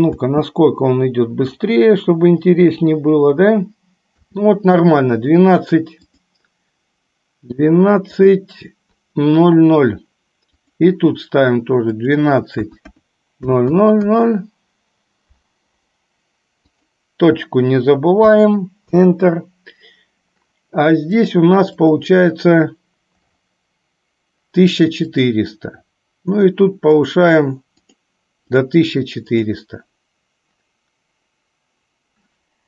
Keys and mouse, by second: 0.2 space, 4.4 space, 6.2 click, 8.2 click, 12.0-19.1 drag, 13.7 KP_0, 21.2 click, 25.2 click, 27.1 click, 28.0 click, 28.6 click, 29.5 click.